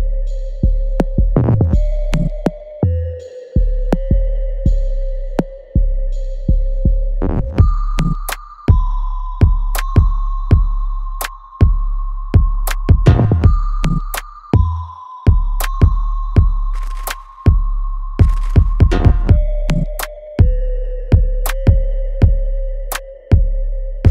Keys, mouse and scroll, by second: 0.4 alt+right click, 1.3 click, 1.6-3.6 alt+drag, 3.6 alt+right click, 4.1 alt+click, 5.0 middle click, 5.4 alt+click, 6.3 alt+right click, 8.2 click, 9.1 shift+click, 9.1 shift+click, 12.3 alt+right click, 12.6 alt+click, 12.6 alt+click, 13.0 alt+middle click, 13.4 alt+right click, 14.2 shift+click, 15.2 ctrl+z, 15.9 shift+click, 16.7 ctrl+z, 17.9 shift+click, 19.2 right click, 19.7-24.1 alt+drag.